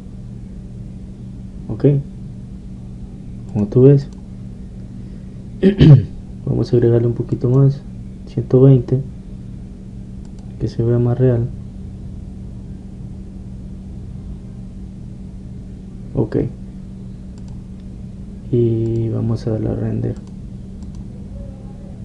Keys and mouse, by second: 4.7-7.0 drag, 8.5-10.4 drag, 11.4-13.3 drag, 18.7-19.9 middle drag, 19.9-22.0 drag.